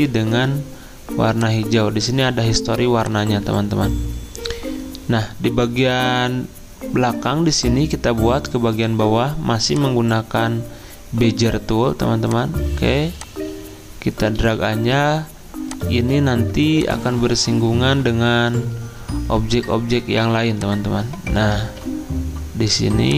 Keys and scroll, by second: 14.4 ctrl+z, 21.6 ctrl+z.